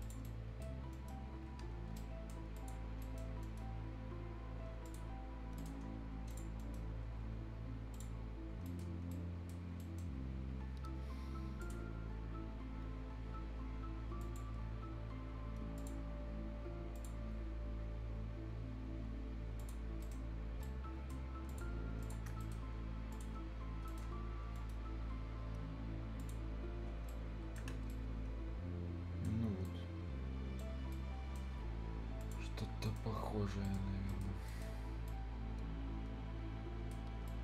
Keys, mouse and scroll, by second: 0.0 ctrl+click, 0.2 right click, 0.9 ctrl+middle click, 1.5 ctrl+middle click, 2.0 ctrl+right click, 2.6 ctrl+click, 3.0 ctrl+right click, 3.4 ctrl+middle click, 4.9 ctrl+click, 5.6 ctrl+right click, 5.9 ctrl+scroll down 1, 6.1 ctrl+scroll up 1, 6.3 ctrl+click, 6.6 ctrl+middle click, 7.9 ctrl+click, 8.7 ctrl+right click, 8.9 ctrl+scroll down 1, 9.1 right click, 9.7 ctrl+scroll up 1, 9.8 ctrl+right click, 11.6 ctrl+click, 14.2 ctrl+click, 16.0-16.6 ctrl+scroll up 1, 17.0 ctrl+click, 17.2 ctrl+scroll down 1, 19.6 ctrl+click, 19.9 ctrl+scroll down 1, 20.0 ctrl+right click, 20.3 ctrl+scroll up 1, 20.6 ctrl+right click, 21.2 ctrl+scroll up 1, 21.5 ctrl+click, 21.7-22.0 ctrl+scroll down 1, 22.0 shift+click, 22.2 shift+scroll down 1, 22.4 shift+right click, 23.1 shift+click, 23.4 shift+scroll up 1, 23.9 shift+right click, 24.1 shift+scroll down 1, 24.3-24.9 shift+scroll up 2, 24.6 shift+middle click, 26.2 shift+click, 26.9 shift+scroll down 1, 27.1 shift+right click, 27.5 shift+Escape, 27.7 shift+scroll down 1, 27.7 shift+Escape, 27.9-29.4 shift+right drag, 29.4 shift+scroll up 1, 29.7 shift+right click, 30.7 shift+scroll down 1, 30.9 shift+right click, 32.2 shift+click, 32.5 shift+scroll down 1, 32.7 shift+scroll up 1, 32.9 shift+right click, 33.9 shift+scroll up 1, 34.1 shift+right click, 34.3 shift+scroll down 1, 34.5 shift+right click, 34.8 shift+scroll up 1, 35.1-37.0 shift+right drag, 37.0 shift+scroll down 1, 37.3 shift+right click.